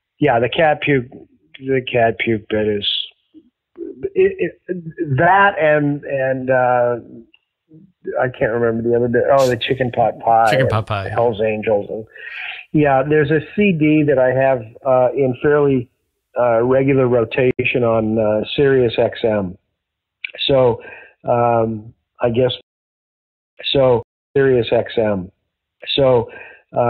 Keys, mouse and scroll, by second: 7.6 click, 8.5 click, 9.3 click, 13.4 click, 15.2 click, 15.9-17.2 drag, 17.4 Delete, 19.1 click, 20.2 click, 21.4-22.5 drag, 22.5 space, 23.1 ctrl+shift+Delete, 23.5 space, 23.9 space, 24.2 click, 24.2 space.